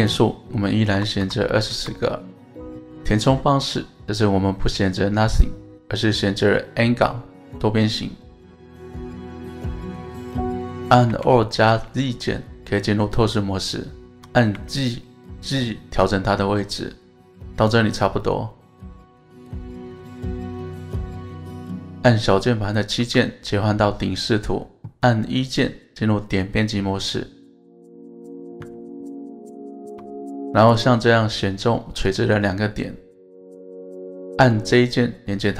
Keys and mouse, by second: 0.2-2.5 drag, 3.0-5.4 drag, 7.4-8.2 middle drag, 9.4-10.6 middle drag, 11.1 KP_1, 11.8 alt+z, 14.1 g, 14.2 g, 14.5 z, 18.7-21.8 middle drag, 23.0 KP_7, 25.0 1, 27.0 Tab, 27.6 1, 29.5 shift+middle click, 30.7 click, 31.8-33.2 drag.